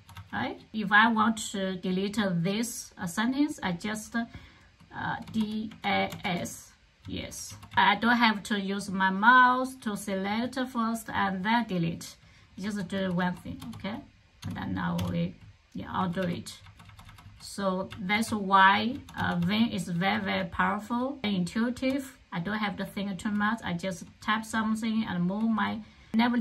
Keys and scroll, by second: 5.2-5.7 typing, 6.8-7.9 typing, 12.5-14.9 typing, 16.0-26.0 typing.